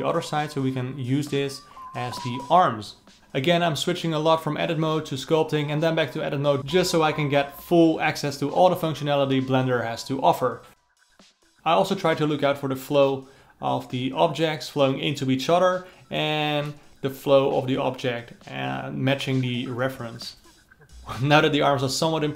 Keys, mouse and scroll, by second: 0.0 click, 1.2 Tab, 2.0 s, 7.2 a, 7.6 s, 8.7 s, 11.6 alt+middle click, 11.6 click, 11.8 alt+middle click, 12.1 click, 12.3 alt+middle click, 12.5 click, 12.7 alt+middle click, 12.9 click, 13.1 alt+middle click, 13.3 shift+click, 13.5 alt+middle click, 13.7 click, 13.8 ctrl+alt+middle click, 14.4 click, 14.7 ctrl+alt+middle click, 15.0 click, 15.3-16.5 alt+middle drag, 16.5 KP_1, 16.8 scroll down 1, 17.0 click, 17.9-18.9 drag, 18.9 z, 19.5-21.1 drag, 21.1 ctrl+z, 21.3 KP_9, 22.0 click, 22.3 z.